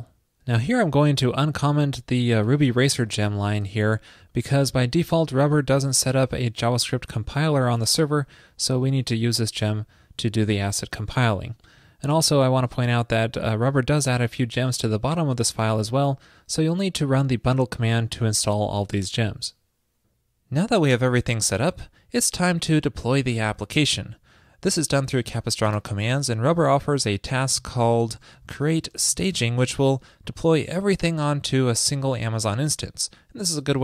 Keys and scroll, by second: 3.8 super+/, 11.0 super+s.